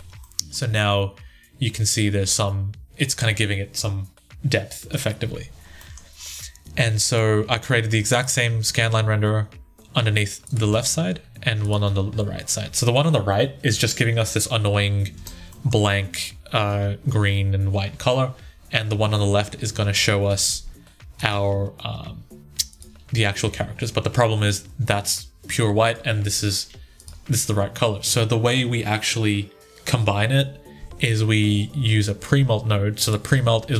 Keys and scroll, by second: 0.0-1.2 typing, 4.2-5.0 typing, 10.5 1, 11.6 1, 14.9 Tab, 21.8 1, 23.3 Tab, 26.8 2, 33.1 1.